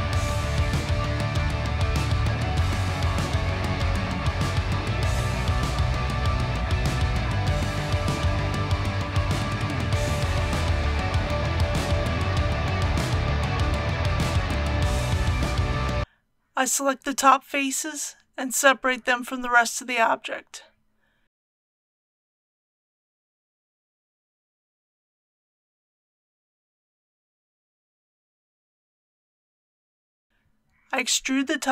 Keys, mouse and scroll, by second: 1.6 alt+e, 2.2 click, 8.1 alt+a, 9.7 middle click, 10.9 Tab, 11.8 alt+a, 12.4-14.2 middle drag, 14.8 KP_1, 16.0 Tab, 16.7-17.8 middle drag, 20.5 c, 21.1 click, 21.6 right click, 23.1 p, 24.2 click, 25.4 Tab, 27.5 click, 28.7-29.0 typing, 29.3 Return, 30.6 Tab.